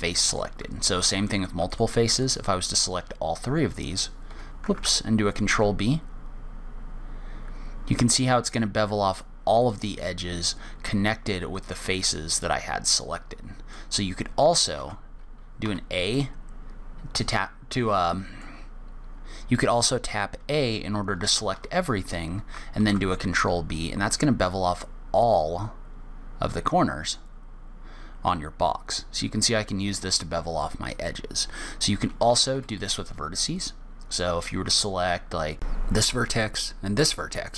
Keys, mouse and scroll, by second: 0.3 middle click, 1.0 ctrl+z, 2.1 shift+click, 2.5 shift+click, 3.3 g, 5.7 ctrl+b, 10.4 middle click, 15.2 ctrl+z, 16.0 a, 16.5 middle click, 21.1 shift+middle click, 21.9 a, 23.2 ctrl+b, 33.9 click, 35.0 click, 36.0 click, 36.9 shift+click.